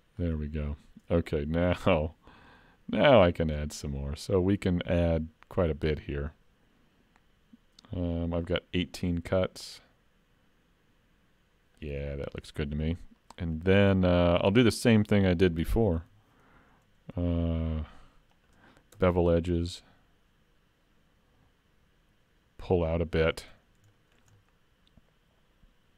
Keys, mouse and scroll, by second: 1.7 ctrl+r, 12.7 middle click, 14.7 middle click, 16.0 ctrl+e, 23.6 scroll up 2, 23.9 shift+middle click, 24.4 middle click.